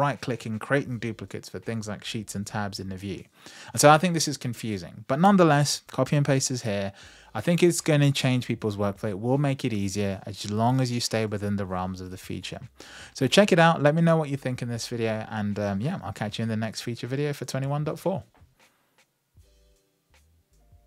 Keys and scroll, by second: 9.8 super+v.